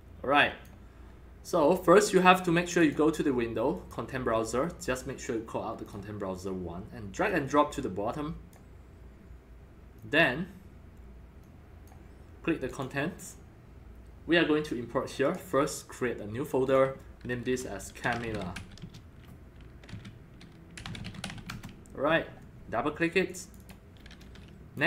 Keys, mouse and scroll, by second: 1.3-2.8 drag, 2.8 click, 3.8 click, 5.8 click, 7.2-8.5 drag, 10.0 click, 11.4 click, 12.7 click, 15.3 right click, 16.3 right click, 16.7 click, 16.8-18.1 drag, 17.8-19.1 typing, 19.9 ctrl+a, 20.5-21.8 typing, 23.3 click, 23.4 click, 23.6 click, 24.2 click.